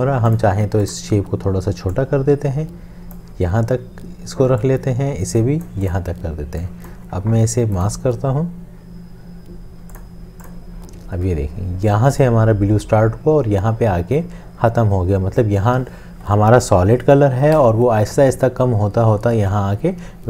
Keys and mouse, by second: 7.8 right click.